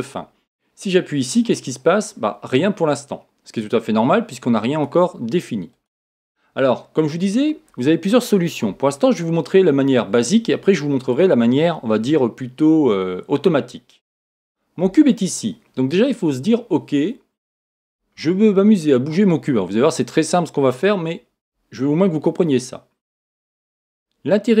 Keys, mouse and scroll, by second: 4.7 click, 5.7 click, 7.1-8.6 scroll down 1, 9.1-24.6 shift+middle drag.